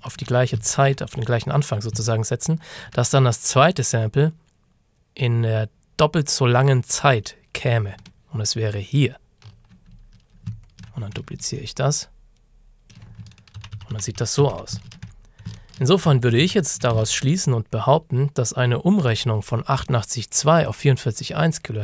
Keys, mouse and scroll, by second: 0.7 ctrl+scroll up 1, 2.2-2.7 ctrl+shift+scroll down 1, 2.8 shift+scroll down 1, 4.9 scroll down 1, 8.0 alt+Num_Lock, 8.1 alt+click, 10.6-11.2 ctrl+scroll down 2, 11.6 ctrl+click, 13.6 ctrl+d, 14.6 d, 14.9 ctrl+shift+scroll down 1, 15.6-16.1 ctrl+shift+scroll down 2, 16.2 ctrl+d, 17.1 ctrl+shift+scroll down 1, 17.7-18.3 ctrl+shift+scroll up 3, 19.1-19.8 shift+scroll up 1, 19.8 click.